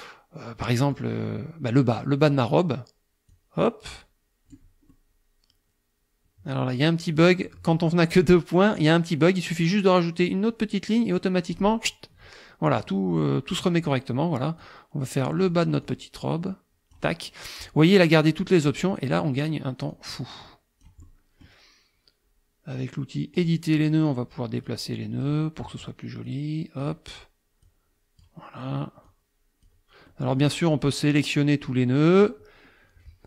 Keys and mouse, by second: 0.6 middle click, 3.3-4.7 drag, 4.9-7.8 middle drag, 10.2-11.7 drag, 12.8 click, 14.6-15.7 drag, 15.9-17.1 drag, 19.9-21.6 drag, 23.4 click, 24.7 click, 26.3 click, 27.7 click, 29.1 click, 30.1 click, 31.1-32.5 drag.